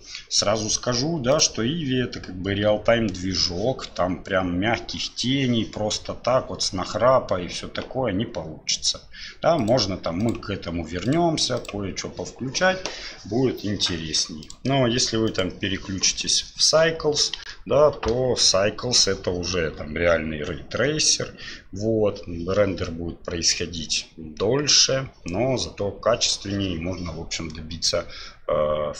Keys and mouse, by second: 9.6 click, 11.6 click, 14.4-15.4 drag, 17.4 F12.